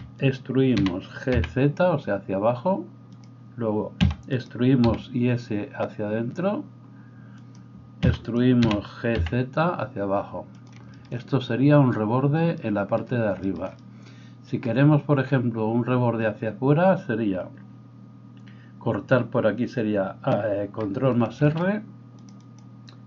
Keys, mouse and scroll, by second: 0.8 g, 4.9 e, 4.9 s, 8.6 g, 21.4 ctrl+r.